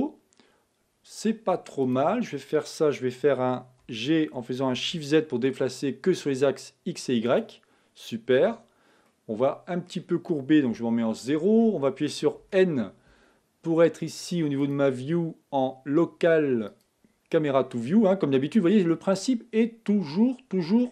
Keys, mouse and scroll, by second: 2.1 click, 4.2 g, 9.1-10.7 middle drag, 10.7 KP_0, 12.8 n, 16.8 click, 18.0-20.9 middle drag.